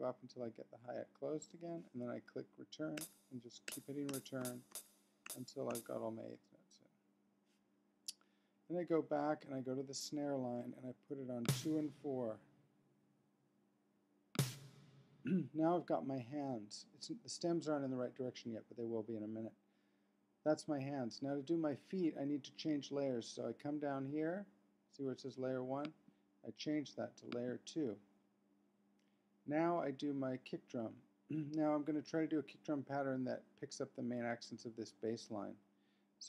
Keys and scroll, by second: 2.9 Return.